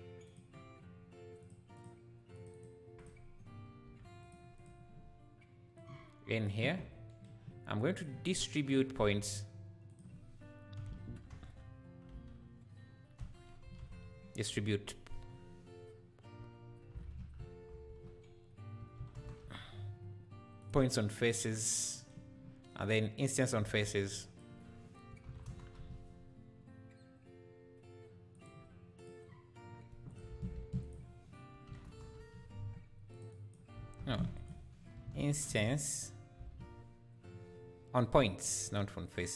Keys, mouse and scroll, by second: 0.3 click, 1.5 click, 4.2 click, 7.8 click, 22.7 click, 30.2 click, 33.8 x.